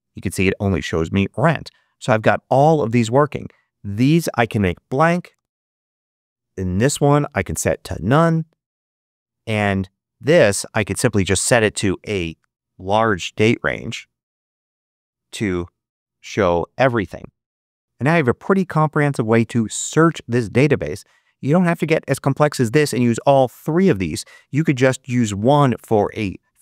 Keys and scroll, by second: 4.9 BackSpace, 5.2 Return, 13.0 0, 13.5 Return, 16.1 5, 16.7 Return.